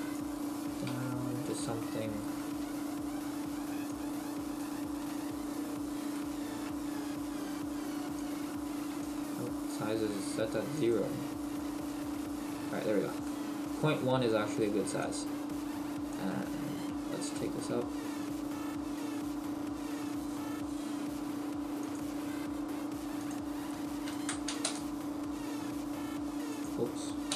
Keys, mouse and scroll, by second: 0.5-1.0 scroll down 3, 1.0 shift+middle click, 1.0-1.7 scroll down 2, 1.7-2.2 scroll down 1, 2.6-3.0 scroll down 1, 3.0 Tab, 4.3 click, 5.2-6.2 scroll down 9, 6.2 shift+middle click, 6.9-7.4 scroll up 2, 7.8-8.2 scroll up 6, 9.4-9.8 scroll up 1, 10.8 click, 12.5 scroll up 3, 13.3 shift+middle click, 15.3 click, 16.5-17.0 scroll up 1, 17.0-17.4 scroll up 4, 17.4 shift+middle click, 21.8 click, 26.5 click.